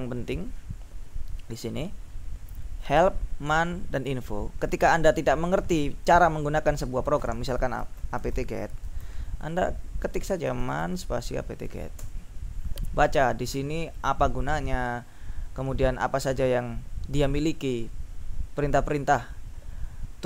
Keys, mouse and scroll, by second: 7.6-9.5 typing, 9.6 ctrl+t, 9.7 ctrl+BackSpace, 10.6 ctrl+m, 10.7 ctrl+a, 10.9 ctrl+space, 12.0 Return, 13.2 Down, 15.3 Down, 17.6 Down, 18.9 Down, 19.8 Down.